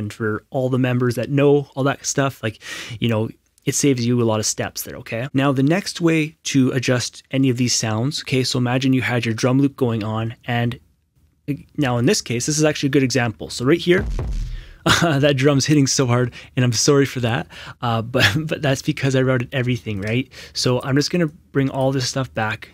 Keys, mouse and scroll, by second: 11.9 click, 13.8 q, 14.0 q, 20.0 click.